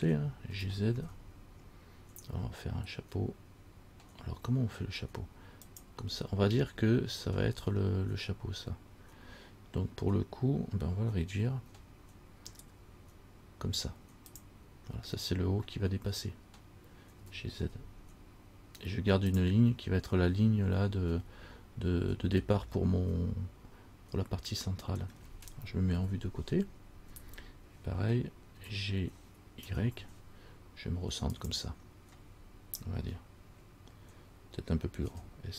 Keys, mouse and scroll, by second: 0.7 g, 11.8 s, 17.4 g, 22.9 scroll up 1, 23.1 middle click, 25.3-26.1 scroll down 1, 26.2 KP_3, 28.8 g, 35.3 s.